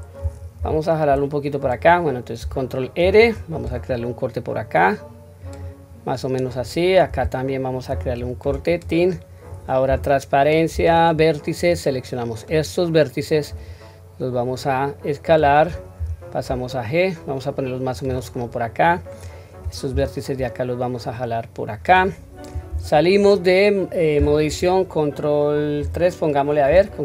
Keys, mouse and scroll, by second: 0.5-0.9 scroll up 1, 0.5 g, 2.9 ctrl+r, 9.8 q, 10.7 1, 11.5-12.5 drag, 13.4 s, 18.8 click, 19.8 g, 22.6 Tab, 25.8 ctrl+3.